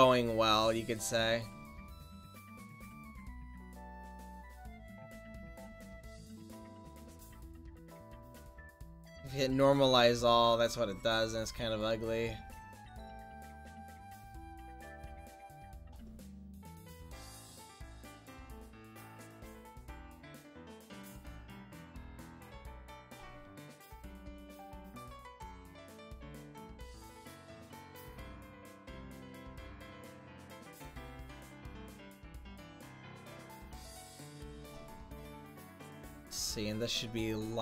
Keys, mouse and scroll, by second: 4.1 middle click, 8.0 click, 19.6 click, 20.4-21.2 middle drag, 22.9-23.6 middle drag, 24.9-29.4 middle drag, 30.5-33.9 middle drag, 33.9-34.8 right drag, 34.8 middle click.